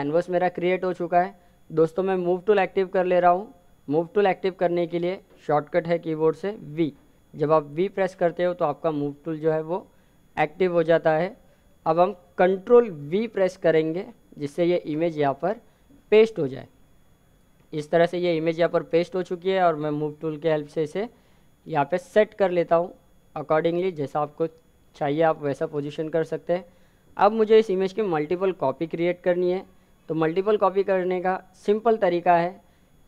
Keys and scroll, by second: 4.5 v, 12.2 ctrl+v.